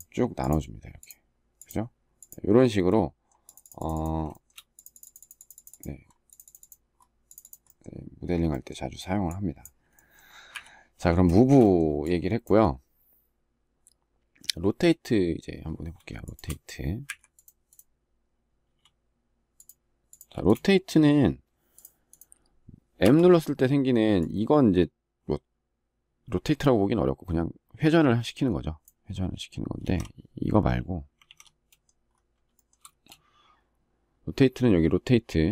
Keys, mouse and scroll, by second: 4.2 shift+middle click, 10.2 Delete, 10.9 shift+middle click, 15.9 shift+click, 16.8 Delete, 20.0 space, 31.0 ctrl+z, 32.3 shift+middle click, 32.6 space.